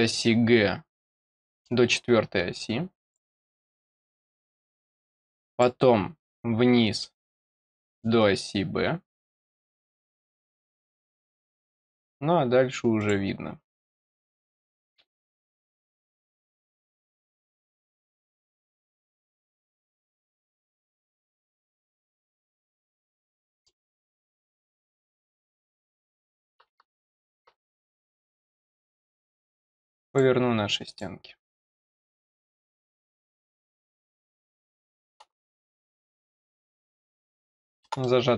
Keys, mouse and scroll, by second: 1.9 scroll up 2, 3.0 click, 4.0 click, 5.4 click, 6.2-6.8 scroll down 2, 6.9-7.9 middle drag, 9.6 click, 11.8 click, 12.9 click, 14.4 click, 16.7 click, 17.8 click, 19.0 click, 19.9 click, 20.8 click, 21.8 middle click, 22.8 scroll up 1, 23.3 middle click, 24.1 scroll up 1, 24.9 click, 25.9 click, 27.8 click, 29.3 click, 30.0 click, 30.8 click, 31.6 click, 32.4 click, 35.8 click, 36.6 click, 37.3 click, 38.0 middle click.